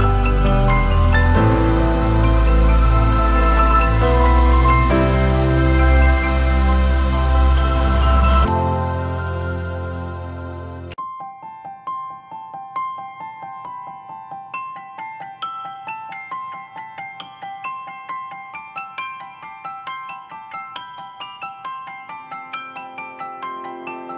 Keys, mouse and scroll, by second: 8.6 ctrl+-, 9.6-11.6 typing, 20.2-21.3 typing.